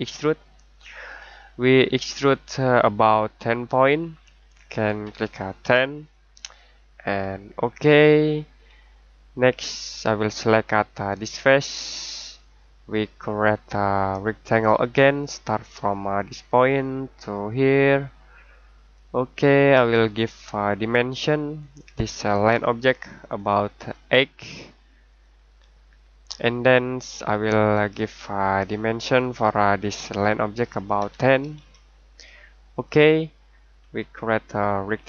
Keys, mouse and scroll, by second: 2.3 click, 5.0 1, 6.3 click, 8.8 middle click, 11.4 click, 24.2 8, 25.1 click, 29.2 click, 31.0 1, 32.7 click, 33.7-34.9 scroll down 1, 34.9 scroll up 1.